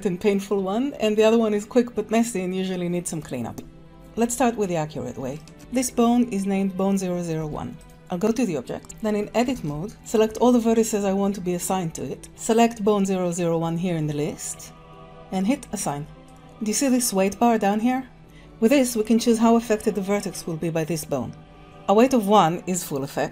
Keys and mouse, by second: 5.2 Tab, 5.4 middle click, 7.4 Tab, 7.8 click, 8.8 Tab, 9.5 alt+a, 12.4 click, 15.7 click, 16.2-18.2 drag, 23.0 click.